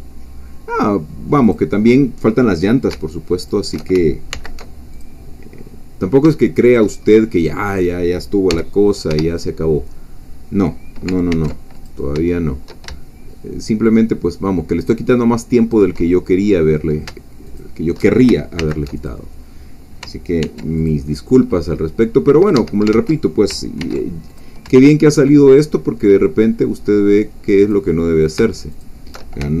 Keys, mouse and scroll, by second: 1.4 shift+click, 3.5 alt+shift+click, 4.3 alt+m, 4.9 alt+click, 5.5-5.9 scroll down 2, 6.4 shift+middle click, 7.0 shift+scroll up 2, 7.7 click, 8.5 g, 11.3 ctrl+r, 11.7 ctrl+click, 15.7 shift+click, 16.1 shift+middle click, 17.6 alt+shift+click, 18.6 alt+m, 19.0 alt+click, 20.4 ctrl+r, 20.8 ctrl+click, 22.6 Escape, 22.9 ctrl+z, 23.8 ctrl+r, 24.3 ctrl+click, 27.6 shift+click, 28.8 alt+shift+click.